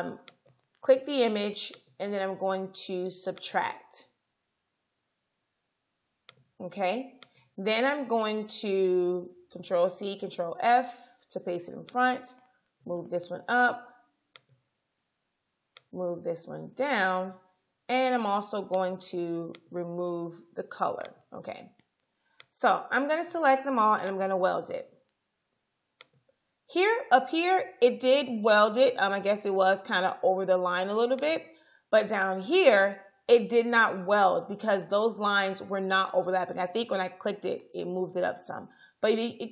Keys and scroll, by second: 9.8 ctrl+c, 10.2 ctrl+f, 20.5 i.